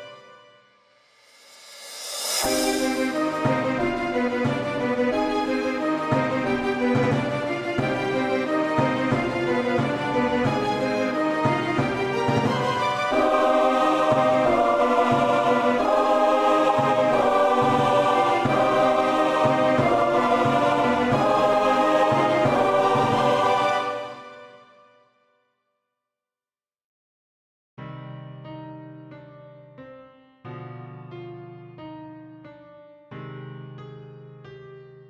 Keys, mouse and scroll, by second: 1.3 click, 3.1 v, 4.8 shift+click, 10.8 shift+click, 15.6 alt+scroll down 1, 16.3-17.4 scroll down 1, 19.5 alt+scroll down 1, 19.8 alt+scroll up 2, 21.8 shift+click, 27.6 Return, 30.6 alt+scroll up 1, 31.4-32.4 scroll up 1, 32.8 shift+click.